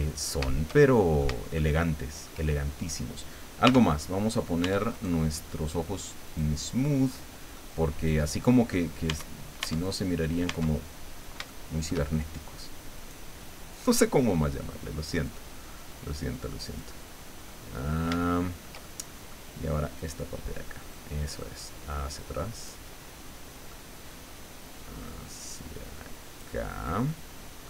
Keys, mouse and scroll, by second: 0.1-0.4 shift+scroll up 3, 0.7 shift+middle click, 1.6 shift+middle click, 3.6 t, 4.6 Tab, 4.9 right click, 6.3 click, 7.1 scroll down 1, 7.6-8.6 middle drag, 8.7-9.0 scroll up 1, 9.1 Tab, 9.8 right click, 10.5 Tab, 11.0 scroll down 1, 11.5 shift+middle click, 13.0 right click, 14.0 click, 15.3-17.0 drag, 17.5-19.5 middle drag, 20.0 click, 20.9-23.9 drag, 25.1-26.6 drag, 27.1 middle click.